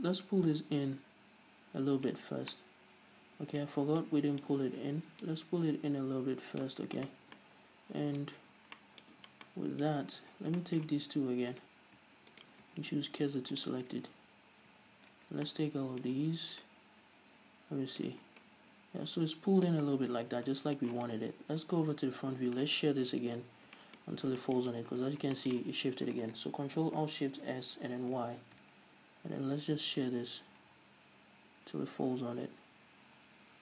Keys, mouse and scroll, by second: 0.1-3.0 drag, 2.7 scroll down 1, 3.0-5.7 middle drag, 4.0-4.5 scroll up 2, 5.7-7.8 drag, 7.3-7.7 scroll down 2, 7.7 Tab, 7.8-12.0 middle drag, 8.9 scroll up 2, 9.6 Tab, 10.8 scroll down 2, 12.0-12.9 right drag, 13.2 shift+s, 14.5 ctrl+z, 15.7 scroll down 2, 15.9-33.6 middle drag, 16.5-17.1 scroll up 2, 18.7 scroll down 2, 20.3-20.9 scroll down 2, 22.4 KP_1, 23.4 z, 23.9 scroll up 2, 24.5-24.8 scroll up 2, 25.5 scroll up 2, 27.6 ctrl+alt+shift+s.